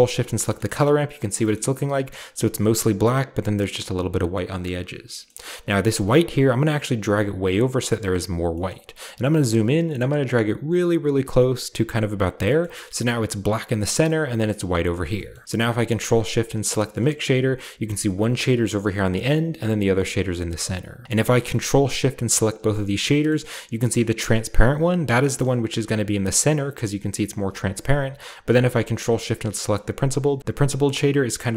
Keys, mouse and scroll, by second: 1.3-3.5 shift+scroll down 1, 5.1 middle click, 5.2-6.1 scroll up 1, 6.1-8.3 drag, 6.1-8.3 scroll up 1, 8.5 middle click, 8.5-9.0 drag, 8.7-10.2 scroll up 2, 10.2-13.8 drag, 13.8-14.6 scroll down 2, 14.1-15.1 shift+middle drag, 14.6-15.8 scroll down 1, 15.3 ctrl+shift+middle click, 15.8 ctrl+shift+click, 16.8-19.8 shift+middle drag, 17.1-19.8 shift+scroll up 1, 20.3-21.0 scroll down 2, 21.2-22.0 ctrl+shift+middle drag, 22.0-23.2 ctrl+shift+drag, 23.3-24.7 middle drag, 25.2 ctrl+shift+click, 26.2 scroll up 2, 28.4 ctrl+shift+click, 29.3-30.1 scroll down 4, 30.1 scroll up 2.